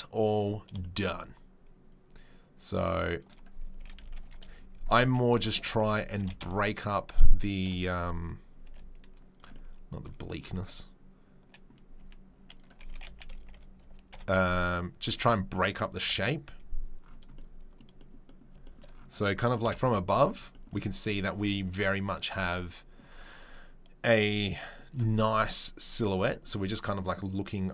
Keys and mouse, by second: 1.9-3.3 drag, 3.3-27.2 middle drag, 3.8 r, 6.1 g, 7.6 KP_7, 8.6 g, 11.9 s, 12.9 r, 14.1 KP_7, 15.2 g, 19.6 KP_7, 27.2-27.7 drag.